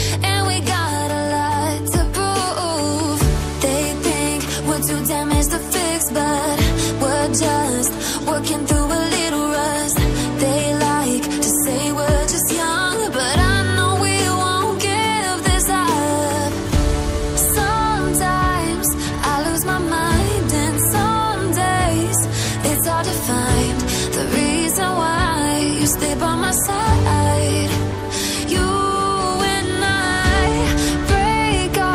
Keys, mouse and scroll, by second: 1.9-2.7 scroll down 1, 2.7 click, 4.5-4.8 scroll up 1, 4.8 click, 6.0 click, 7.5 click, 12.3 double click, 13.0 click, 16.4 click, 17.9-18.3 scroll down 1, 18.3 click, 18.9 double click, 19.3 click, 23.2 click, 24.3 scroll down 1, 27.0 click, 28.1 ctrl+c, 28.3 ctrl+v, 29.1 click, 30.7 click.